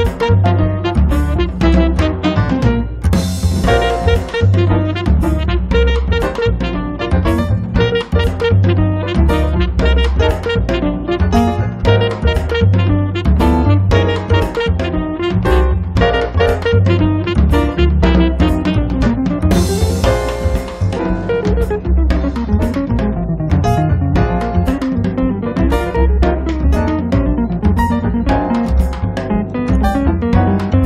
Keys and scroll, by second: 2.7 l, 4.6 1, 5.0 Return, 6.1 space, 6.7 r, 13.1 l, 20.7 space, 28.0 space.